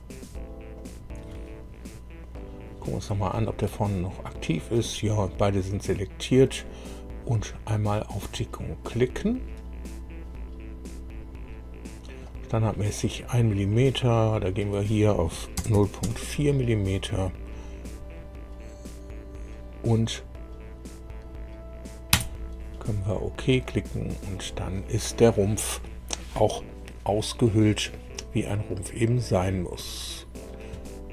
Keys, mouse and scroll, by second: 0.7 ctrl+click, 2.3 middle click, 3.2-4.9 shift+middle drag, 8.9 click, 12.2 click, 14.3 click, 15.5 KP_0, 15.7 KP_Decimal, 16.0 KP_4, 22.1 KP_Enter, 23.6 click, 28.6-30.5 drag.